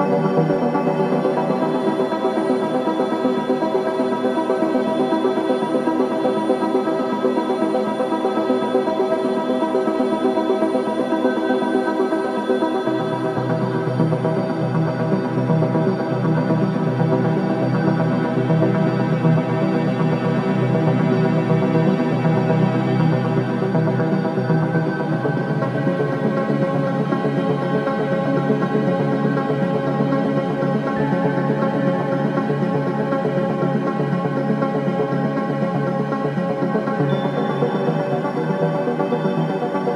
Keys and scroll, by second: 0.3 3, 1.2 Delete, 1.8 4, 14.0 ctrl+d, 14.1 Escape, 20.8 /, 24.1 F9, 27.7 2, 32.8 ctrl+z, 36.1 ctrl+z.